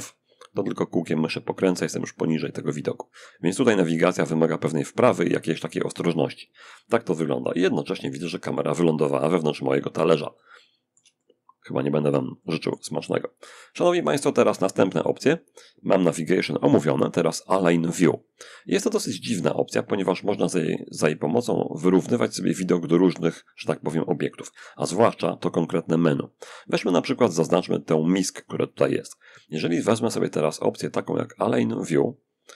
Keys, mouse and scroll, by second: 1.5-2.6 scroll up 1, 3.2 middle click, 3.2-3.8 scroll down 2, 4.3 click, 5.9 middle click, 6.7 click, 7.3-10.9 middle drag, 10.9 shift+click, 11.0-12.6 middle drag, 13.2 click, 26.9 click, 30.4 click.